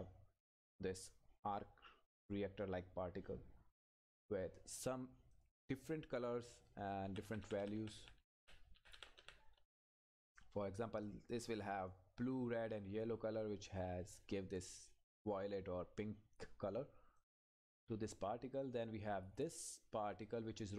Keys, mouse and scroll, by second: 0.7-2.8 scroll down 1, 4.0 click, 7.0 Up, 11.0-17.2 drag, 17.4 Left.